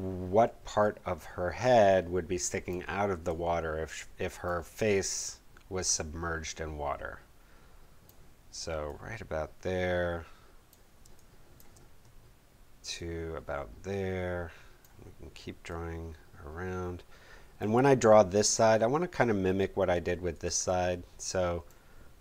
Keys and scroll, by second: 11.0 space.